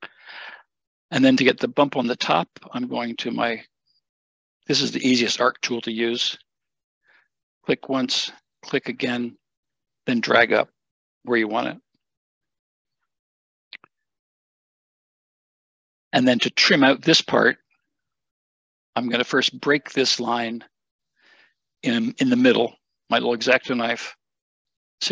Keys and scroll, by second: 14.2 Escape, 23.9 Escape, 24.7 Escape, 24.7 `.